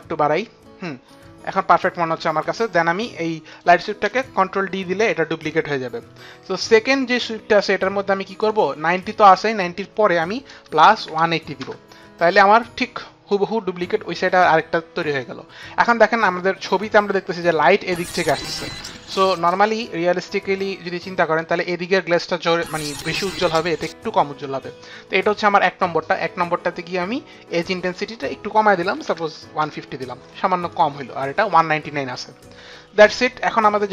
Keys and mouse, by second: 4.7 ctrl+d, 8.3 click, 8.9 click, 10.5 KP_Add, 10.5 click, 10.8 KP_1, 10.9 KP_8, 11.1 KP_0, 11.5 Return, 27.8 click, 28.8 typing, 29.1 click, 29.5 Return, 30.6 click.